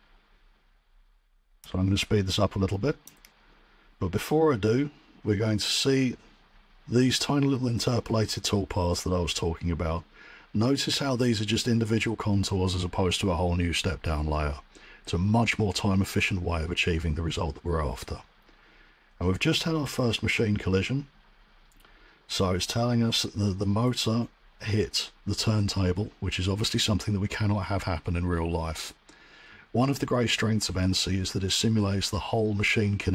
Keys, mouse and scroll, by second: 3.0 click.